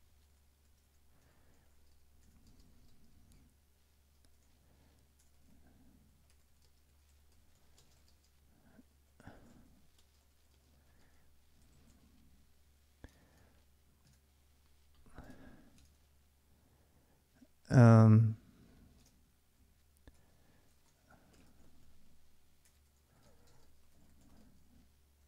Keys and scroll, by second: 0.0-11.6 typing, 13.6-16.0 typing, 18.5-25.2 typing.